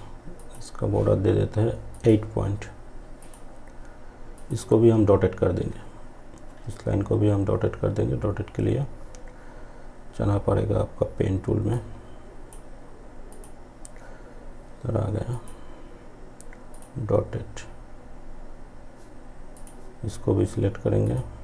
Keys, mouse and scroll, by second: 10.8-17.8 drag, 18.6 click.